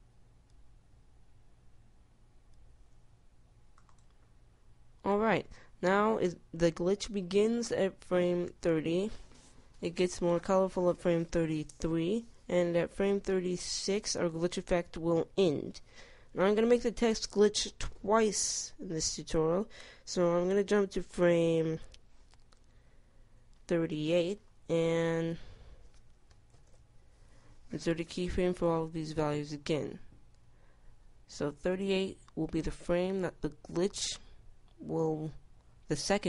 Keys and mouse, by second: 0.6 i, 1.3 i, 3.4 i, 27.5 click, 32.3 i, 33.6 i, 34.6 i, 35.8 i.